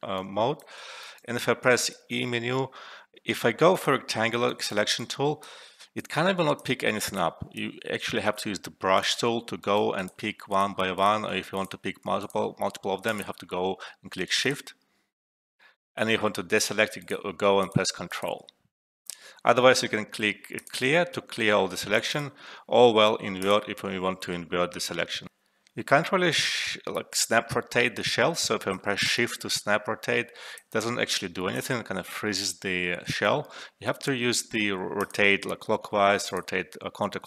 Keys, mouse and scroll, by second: 0.4-1.3 alt+right click, 0.7 alt+middle click, 1.9 e, 3.7 click, 4.4 alt+right click, 4.9-5.5 drag, 8.2 e, 8.9 click, 9.6 alt+right click, 9.9 click, 11.5 shift+click, 13.8 alt+middle click, 14.4 click, 16.5 ctrl+click, 18.9 alt+`, 20.6 click, 25.2 alt+`, 27.5-28.7 drag, 29.2 ctrl+z, 30.4-30.7 shift+drag, 32.0 ctrl+z, 35.0 click.